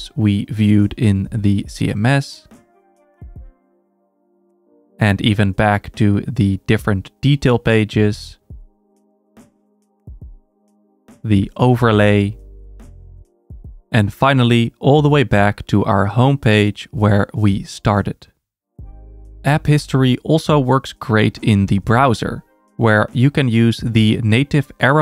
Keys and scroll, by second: 2.2 super+], 5.3 super+[, 7.9 super+[, 10.3 super+[, 12.5 super+[, 15.5 super+[, 18.9 super+[.